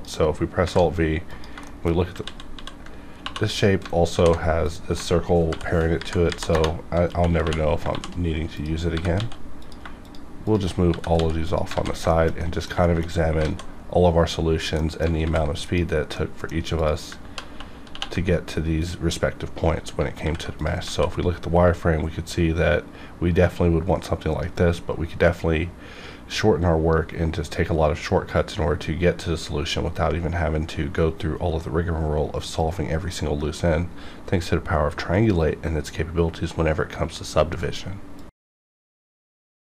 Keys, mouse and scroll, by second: 0.0 click, 0.6 alt+v, 1.3 click, 1.6 shift+middle click, 2.2 ctrl+z, 3.1 2, 4.0 alt+h, 4.6 click, 5.5 alt+p, 5.9 Down, 6.4 Return, 7.0-9.1 typing, 8.5 click, 9.6 click, 10.0 shift+click, 10.9 g, 11.1 x, 11.4 click, 11.7 alt+a, 12.1 shift+middle click, 12.4 middle click, 12.8 shift+middle click, 13.4 alt+a, 13.9 scroll up 1, 14.2-14.7 scroll down 1, 14.7 middle click, 15.1 alt+v, 15.6 click, 16.1 middle click, 16.1 middle click, 16.7 click, 17.3 ctrl+3, 18.8 click, 20.1 alt+v, 20.5 click, 20.9 alt+a.